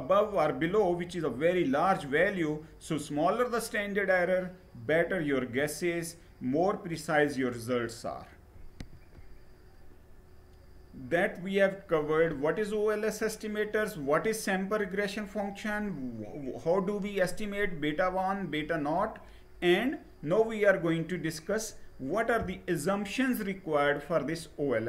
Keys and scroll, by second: 8.5 Page_Down.